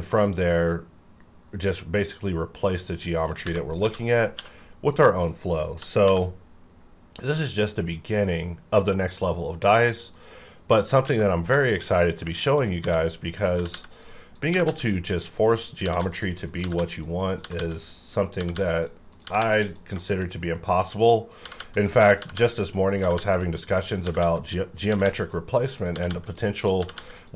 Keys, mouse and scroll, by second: 3.7 f, 4.3 q, 4.8 click, 5.8 typing, 6.4 scroll down 1, 6.7-7.2 scroll up 1, 9.0-9.5 scroll down 1, 9.5-10.1 scroll up 1, 10.1 click, 11.0 alt+a, 11.3 scroll down 1, 11.6 shift+middle click, 11.9 scroll up 2, 12.4 shift+middle click, 12.7 scroll up 2, 12.8-14.7 typing, 13.5 click, 14.3 click, 14.8 click, 15.8-19.4 typing, 16.9 click, 17.7 click, 18.7 click, 19.6 click, 20.0 shift+middle click, 20.9 click, 21.4-27.3 typing, 21.7 click, 22.5 click, 23.3 click, 24.4 click, 25.2 click, 25.9 click, 26.2 click, 27.2 click.